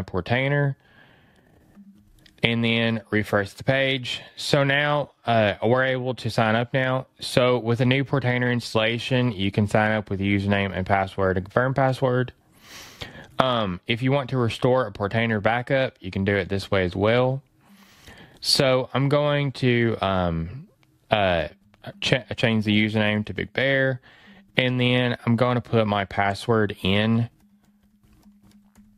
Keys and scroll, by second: 2.9 super+r.